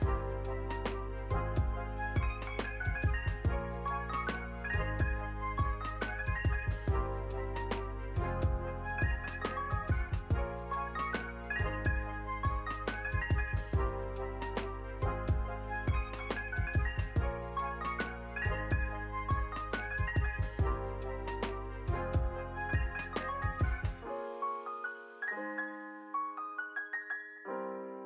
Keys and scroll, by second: 5.6 ctrl+s, 7.8 u, 9.6 =, 17.3 ctrl+c, 18.1 ctrl+v, 21.0 Escape, 25.8 n, 26.3 space.